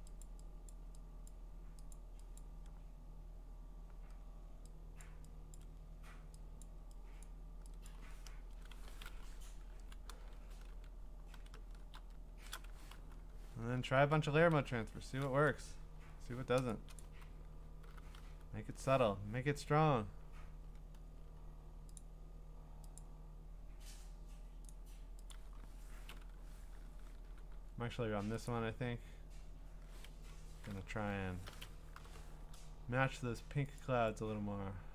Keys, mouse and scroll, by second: 0.2 click, 0.7 click, 1.3 click, 1.9 click, 2.4 click, 5.0 click, 5.6 click, 6.6 click, 7.2 click, 7.9 click, 8.3 Return, 9.0 click, 9.0 typing, 9.7 alt+shift+c, 10.3 alt+shift+o, 10.7 alt+shift+d, 11.3 alt+shift+s, 11.9 alt+shift+o, 12.4-13.4 typing, 17.0 click, 17.1-18.2 typing, 21.0 scroll, 21.1 middle click, 22.0 click, 23.0 click, 25.3 click, 27.2 g, 28.5 click, 30.1 Escape, 31.9 ctrl+u, 33.8 click.